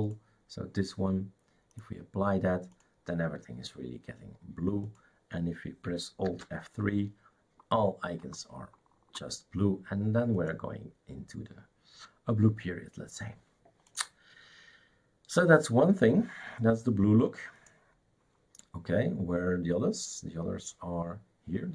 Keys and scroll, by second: 6.2 alt+F3.